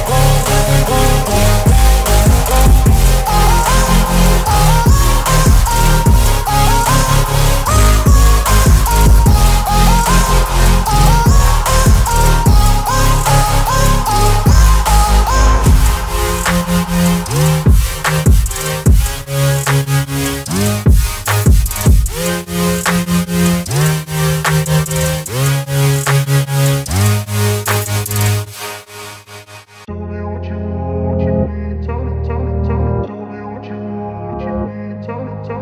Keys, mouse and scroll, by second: 0.4 click, 6.7-7.3 drag, 11.1 click, 13.8-16.7 drag, 17.4 ctrl+t, 18.9-21.0 drag, 26.5 ctrl+a, 27.9 click, 29.4 ctrl+d, 30.8 click, 31.9 t, 32.9 click, 33.2 click.